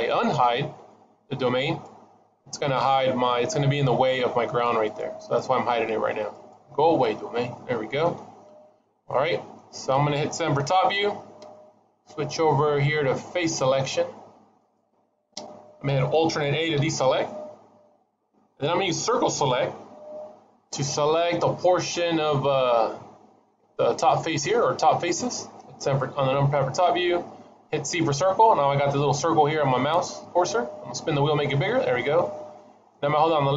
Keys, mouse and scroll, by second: 1.5 click, 4.3 click, 4.7 click, 5.1 click, 6.2 click, 7.4 shift+middle click, 8.1 middle click, 11.1 KP_7, 14.5 click, 16.6 alt+a, 19.8 c.